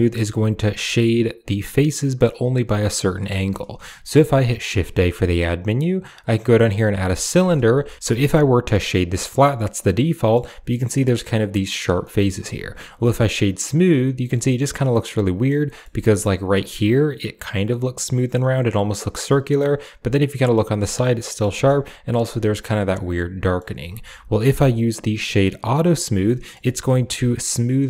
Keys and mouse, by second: 4.6 shift+a, 7.7 click, 7.7 g, 7.9 w, 9.5-10.2 drag, 11.9 drag, 12.3 w, 14.3-15.3 drag, 15.5 click, 15.6 middle click, 19.1-20.3 middle drag, 21.0 middle drag, 21.4 shift+middle click, 22.7-23.4 middle drag, 23.7 w, 26.1 middle drag, 26.5 shift+middle drag.